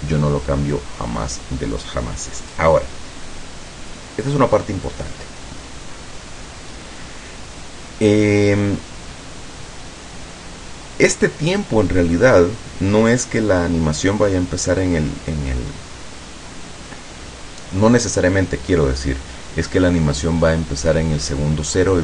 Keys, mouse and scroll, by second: 2.2-2.6 scroll down 2.